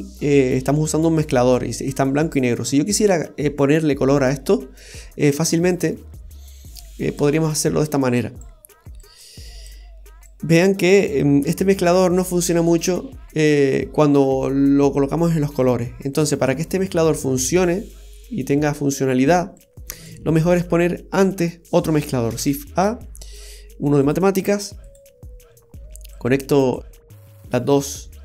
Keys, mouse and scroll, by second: 1.4-2.3 scroll down 3, 1.9 middle click, 5.0-5.4 scroll down 1, 6.7 click, 7.8 click, 9.0 click, 10.3 click, 19.6 click, 22.4 shift+a, 25.2 typing, 26.1 click.